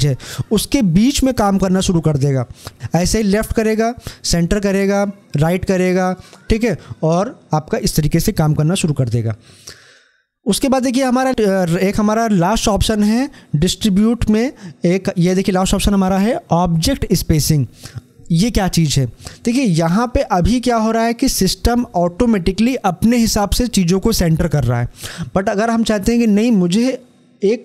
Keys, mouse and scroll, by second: 3.4 click.